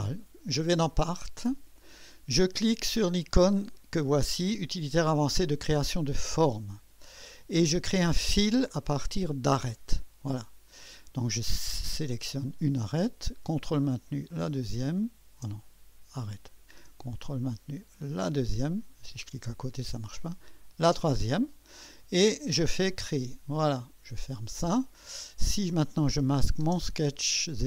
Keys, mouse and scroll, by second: 0.0 click, 1.0 click, 6.2 click, 9.7 click, 12.2 click, 14.4 click, 16.4 click, 18.2 click, 20.4 click, 22.9 click, 24.4 click, 26.1 click, 26.5-27.6 drag, 26.6 space.